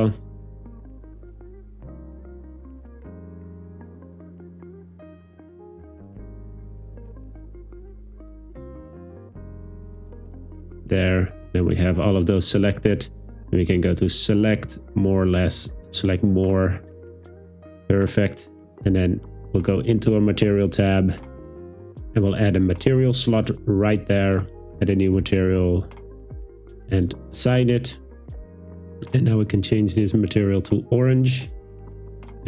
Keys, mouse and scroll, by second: 0.7 shift+right click, 14.0-16.2 drag, 23.4 click, 24.9 click, 27.0 click, 29.6-30.9 drag.